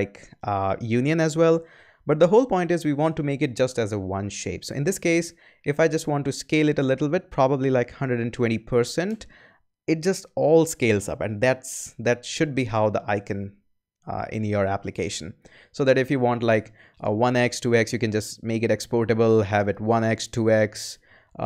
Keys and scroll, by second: 7.8-8.7 typing, 10.0 Return.